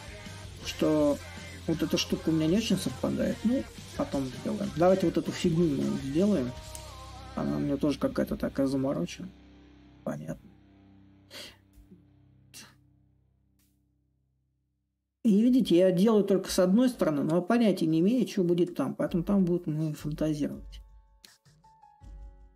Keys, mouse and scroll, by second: 0.0-7.0 middle drag, 8.0-13.0 drag, 13.3-18.3 drag, 18.5-21.6 drag, 21.6 a.